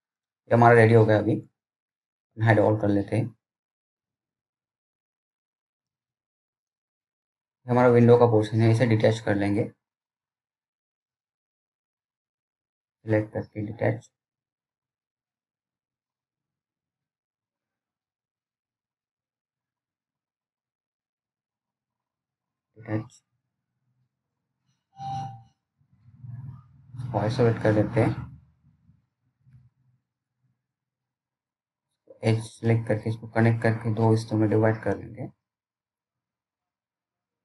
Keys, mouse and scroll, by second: 4.0 click, 5.0 scroll down 1, 5.4 alt+middle click, 6.3 scroll up 1, 6.6 click, 7.0 scroll down 1, 7.2 middle click, 7.6 scroll up 1, 7.9 scroll down 1, 8.1 middle click, 12.3-12.7 scroll up 1, 12.7-13.3 scroll down 1, 13.3-14.1 scroll up 1, 15.2-15.5 scroll down 1, 15.5 middle click, 17.7 p, 18.8 click, 20.7-22.1 scroll down 1, 22.1 click, 24.9 right click, 25.4 click, 26.8-27.1 scroll down 1, 27.3 alt+middle click, 28.8 click, 29.5-30.1 scroll down 1, 30.1 middle click, 31.1 click.